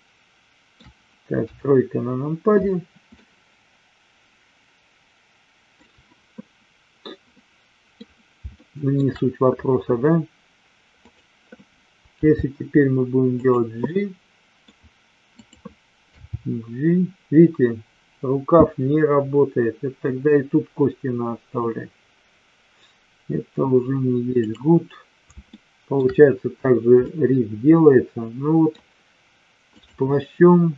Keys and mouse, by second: 1.4 KP_3, 3.2-5.8 middle drag, 7.3-7.9 middle drag, 8.5-8.9 shift+middle drag, 11.0 click, 12.0 g, 13.8-14.7 middle drag, 15.3 click, 16.4 g, 25.4-26.0 shift+middle drag, 27.2-28.7 middle drag, 29.7-30.7 drag.